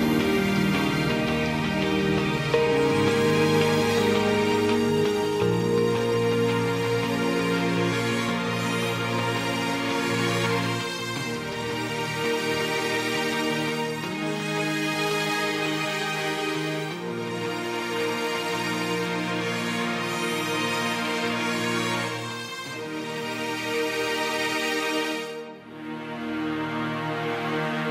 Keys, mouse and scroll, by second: 23.8 ctrl+d.